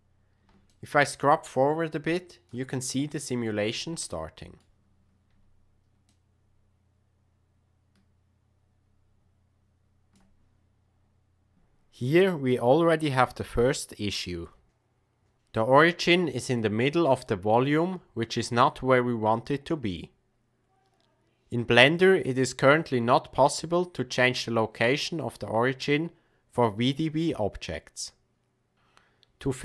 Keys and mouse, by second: 0.6-2.5 shift+drag, 4.1-4.6 middle drag, 6.1-7.0 shift+drag, 7.0-7.8 shift+middle drag, 7.8-10.2 shift+drag.